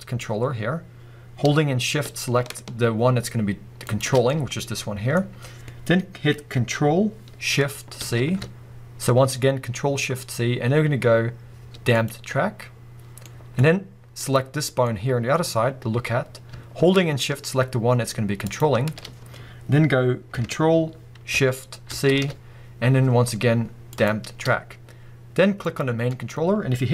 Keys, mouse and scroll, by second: 3.8 shift+click, 4.1 scroll down 2, 4.3-14.2 middle drag, 5.2-6.4 scroll up 2, 6.4-8.0 scroll up 1, 8.0 ctrl+shift+c, 14.2 click, 14.8-18.4 middle drag, 15.4-17.0 scroll up 2, 17.0-18.4 scroll up 1, 18.4 shift+click, 21.9 ctrl+shift+c, 24.4-25.6 scroll down 2, 25.6 click, 26.1-26.9 middle drag.